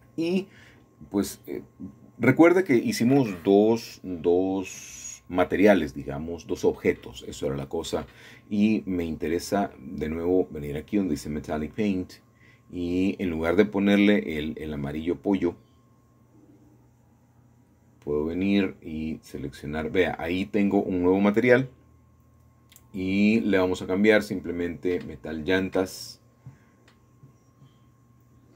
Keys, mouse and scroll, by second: 4.0 middle click, 5.6 scroll down 2, 5.9 scroll up 2, 6.0-7.0 scroll down 2, 8.8 scroll down 2, 8.8 scroll up 2, 9.2 scroll down 4, 11.2 click, 13.3 click, 17.0 scroll up 1, 17.1 scroll down 1, 17.4-19.9 scroll up 1, 19.9 scroll up 1, 21.4 click, 21.6 click, 24.3-25.5 typing, 27.4 Return.